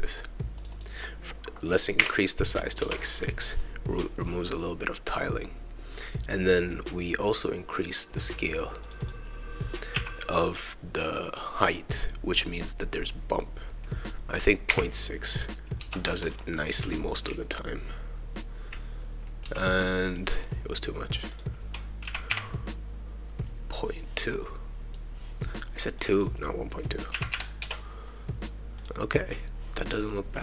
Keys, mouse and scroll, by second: 0.6 click, 0.7 click, 3.4-4.5 scroll down 2, 4.6-5.2 scroll up 2, 7.9 click, 8.8 click, 9.0-12.8 drag, 16.6-20.1 right drag, 16.7 a, 18.1 q, 19.5 e, 21.2 click, 21.3 click, 24.2-25.2 right drag, 26.0-28.1 drag, 28.7 click.